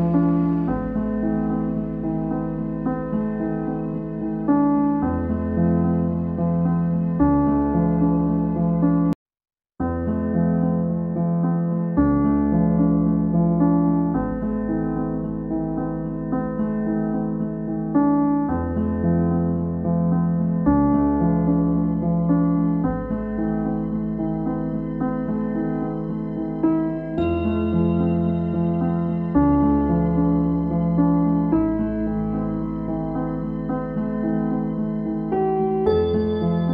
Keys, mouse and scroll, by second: 0.2 click, 0.6 click, 3.2 Tab, 4.8 z, 5.1-7.2 shift+middle drag, 7.2 click, 7.9 s, 10.4 s, 14.0 shift+middle click, 14.8 click, 15.0-16.0 scroll down 4, 16.0 3, 16.4 e, 17.7 s, 19.5-20.0 scroll up 3, 20.0 Tab, 21.1 scroll down 4, 21.8-22.4 scroll up 1, 22.4 Tab, 24.0 ctrl+r, 27.4 s, 30.7 s, 33.5 s, 34.6-35.4 scroll up 2.